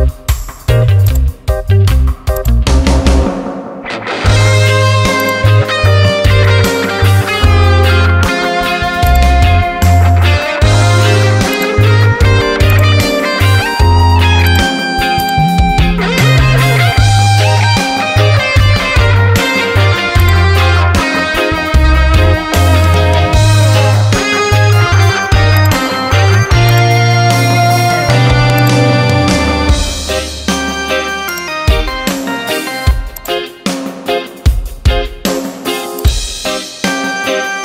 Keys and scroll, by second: 17.8 ctrl+t, 21.9 Return, 24.0 ctrl+j, 27.9 ctrl+t.